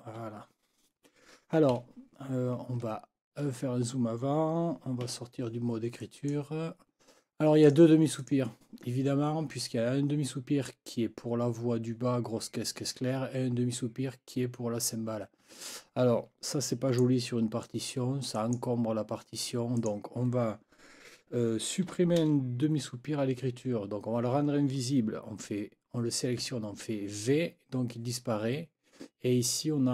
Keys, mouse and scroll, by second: 1.7 Left, 3.1 ctrl+scroll up 2, 5.0 Escape, 6.0 click, 7.6 click, 8.2 click, 16.7 click, 17.6 click, 18.4 click, 19.8 click, 26.4 v.